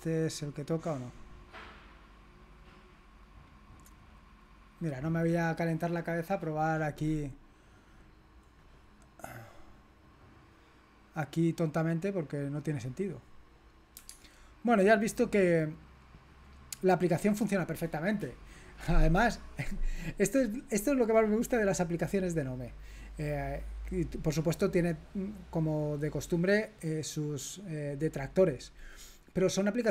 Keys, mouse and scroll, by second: 1.2 click, 2.6 right click, 3.1 click, 3.6 click, 4.4 click, 6.6-7.2 scroll down 2, 7.6-8.2 scroll up 2, 8.8-9.2 scroll up 2, 11.9 click, 14.3 alt+Tab, 16.3 click.